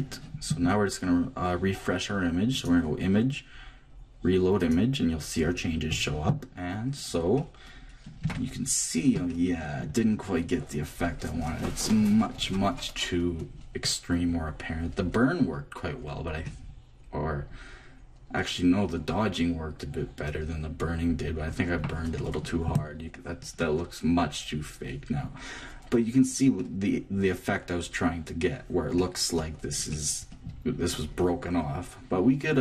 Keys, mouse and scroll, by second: 2.5-4.5 drag, 6.8-7.8 middle drag, 8.2 Tab, 12.9-15.5 middle drag, 16.4-18.3 middle drag, 23.2-25.3 middle drag, 25.5 middle click, 26.1-28.3 middle drag, 28.5-32.2 middle drag.